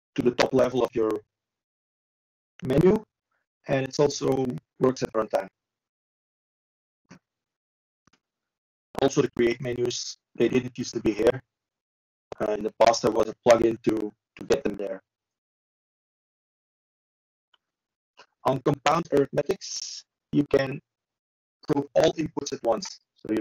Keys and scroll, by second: 11.0 ctrl+z.